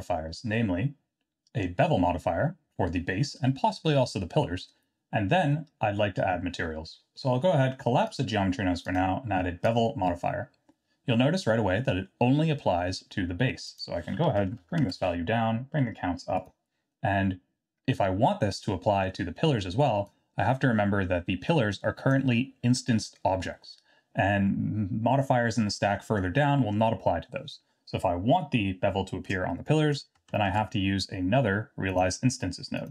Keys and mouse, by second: 8.0 click, 8.8-9.8 drag, 13.7-15.5 drag, 18.6 middle click, 20.2-22.1 drag, 30.5 shift+a.